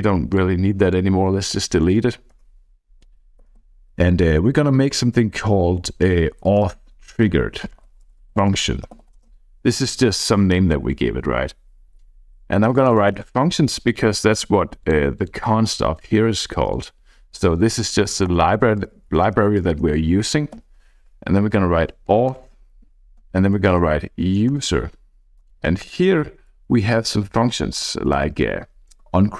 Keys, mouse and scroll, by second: 0.4 click, 1.6 BackSpace, 2.1 BackSpace, 2.4 BackSpace, 3.5 BackSpace, 3.6 ., 6.2-9.5 typing, 12.5-13.9 typing, 14.8 click, 15.2 click, 16.7 click, 18.3 Return, 19.1 BackSpace, 19.3 BackSpace, 20.6 ., 22.4 Return, 23.3 ., 24.6 Return, 25.2 Right, 26.5 Down, 26.7 Down, 27.0 Down, 27.9 Down, 28.1 Up, 28.3 Up, 28.5 Up.